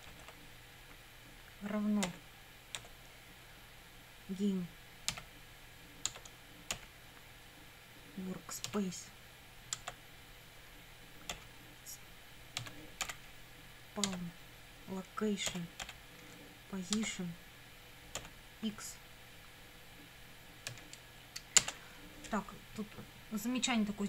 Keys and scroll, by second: 2.0 =, 2.8 space, 5.1 g, 6.1 Tab, 6.7 ., 8.7 w, 9.8 Tab, 11.3 ., 12.6 s, 13.0 p, 14.1 Tab, 15.5 ., 15.8 p, 17.0 Tab, 18.2 ., 20.7 x, 21.6 Return.